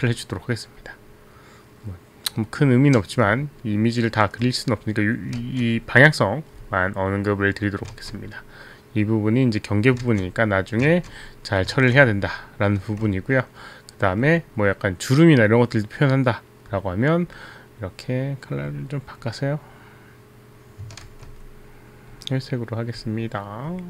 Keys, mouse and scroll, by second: 3.8 space, 5.8 ctrl+z, 8.5 ctrl+z, 10.5 ctrl+z, 11.1 ctrl+z, 13.0 space, 13.6 space, 19.1 click, 21.1 ctrl+z.